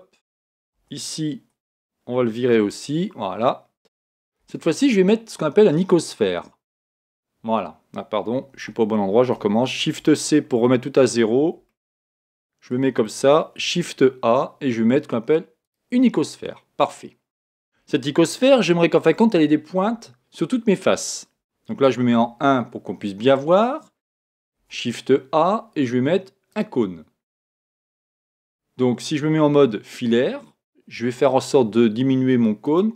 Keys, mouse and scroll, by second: 0.8 Tab, 2.5 x, 4.4 shift+a, 8.5 super+z, 9.8 shift+c, 11.7-13.7 middle drag, 13.7 shift+a, 16.3-20.6 middle drag, 22.1 KP_1, 24.5 shift+a, 29.5 z, 31.1 s.